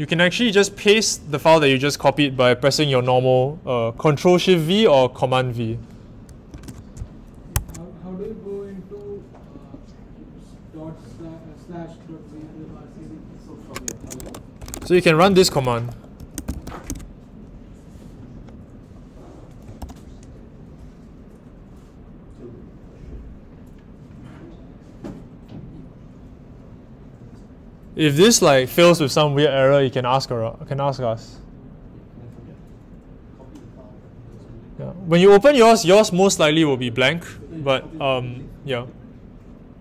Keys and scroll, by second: 6.5 super+v, 7.5 Escape, 13.7-17.4 typing, 19.8 Page_Up.